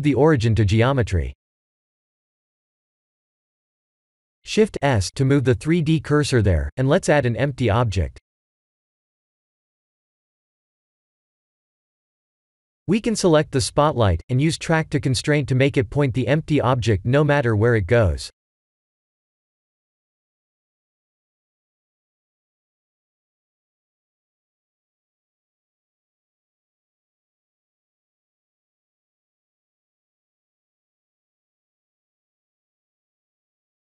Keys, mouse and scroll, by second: 0.5 click, 4.6 shift+a, 6.1 shift+s, 9.7 shift+a, 12.3 middle click, 14.4-15.3 scroll down 7, 15.4 click, 16.2 click, 17.9 click, 18.5 click, 20.7 click, 23.1 KP_7, 24.2 g, 30.2 s, 32.0 middle click.